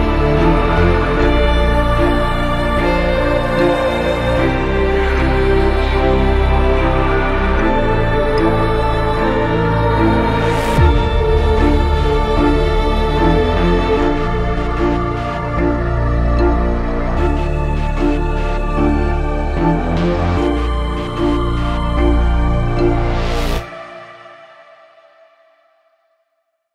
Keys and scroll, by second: 8.1 F3, 19.8 F3, 20.1 Escape, 22.6 shift+F2.